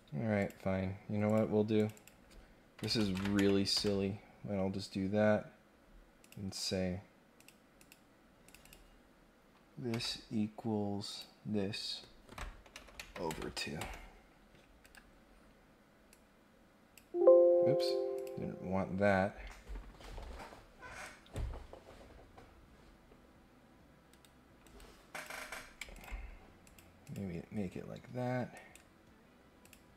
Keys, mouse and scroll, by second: 0.3 click, 1.2 click, 1.8 click, 6.2 click, 7.3 click, 7.8 click, 8.4 click, 8.6 click, 11.0 click, 14.8 Escape, 16.1 click, 17.7 click, 18.1 click, 21.0 right click, 24.1 Escape, 24.6 Escape, 25.1 click, 25.9 ctrl+click, 26.6 click, 27.0 click, 28.5 right click, 29.6 click.